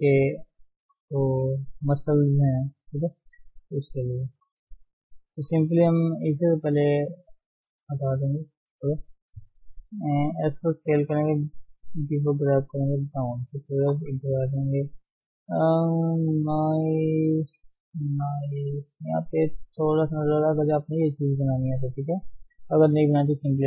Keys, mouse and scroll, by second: 0.1 s, 1.3 g, 4.0-5.3 drag, 5.3-6.0 scroll down 6, 6.3-7.6 right drag, 7.6-8.1 scroll up 1, 8.1 shift+z, 8.3 shift+middle click, 8.5 shift+scroll up 3, 8.8 shift+z, 10.4 s, 11.6 g, 13.0 shift+z, 13.6-14.0 scroll down 2, 14.0 KP_3, 14.8 shift+z, 16.1 shift+z, 16.3-16.6 scroll up 1, 16.6 shift+z, 16.9 shift+middle click, 17.3-18.3 scroll up 1, 18.3 shift+z, 19.2 shift+z.